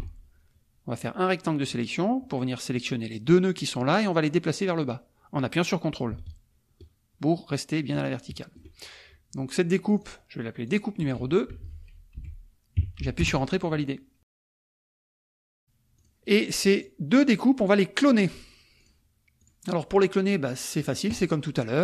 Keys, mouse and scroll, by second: 1.0 click, 4.7-8.7 drag, 9.9 click, 10.7 click, 11.5 Right, 12.1 Delete, 13.2 Return, 16.0 click, 16.7 click, 17.3 click, 18.8 click, 19.5 click, 20.3 middle click, 20.7 click.